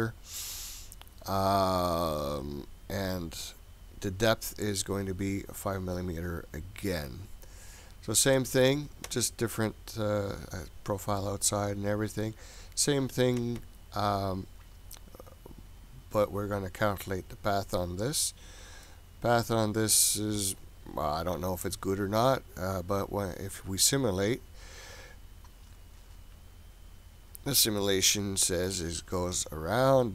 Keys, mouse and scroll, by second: 1.2-3.7 scroll up 10, 4.8-6.7 scroll down 1, 7.2-8.8 scroll up 5, 9.5-11.3 scroll up 4, 11.3-14.3 scroll up 5, 16.9 click, 18.8-21.9 middle drag, 23.5 click, 28.0-28.7 middle drag.